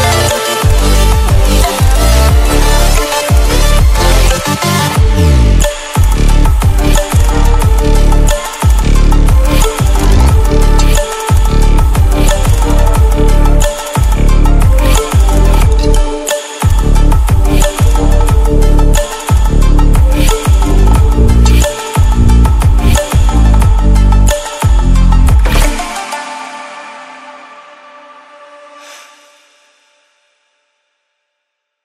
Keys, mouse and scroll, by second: 0.2-0.8 scroll down 1, 1.0-1.4 scroll up 1, 1.4-2.4 scroll down 1, 2.4 click, 4.2 scroll up 1, 6.6 click, 7.8 ctrl+w, 9.0 ctrl+w, 11.0 click, 15.3 scroll down 1, 16.0-19.3 drag, 19.3 right click, 20.3 scroll up 1, 21.3-24.9 drag, 24.9-25.3 scroll up 1, 25.3-27.4 drag, 27.4-27.8 scroll up 1, 27.8-30.1 drag, 30.1-30.5 scroll down 1, 31.6-31.8 scroll up 1.